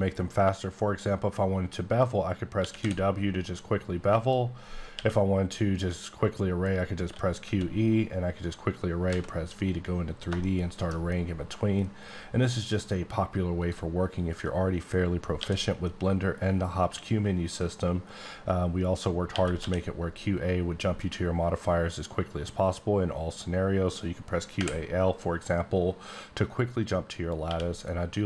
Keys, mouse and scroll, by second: 2.5 typing, 3.7-4.2 scroll up 5, 4.2 click, 4.7 scroll up 1, 4.9 q, 7.0 q, 7.4 e, 9.1 v, 9.6 scroll up 2, 10.4 shift+middle click, 10.9 shift+scroll up 2, 12.0 scroll down 2, 12.5 scroll up 2, 13.6 click, 15.3 q, 19.3-19.6 typing, 26.7 l, 27.5 l.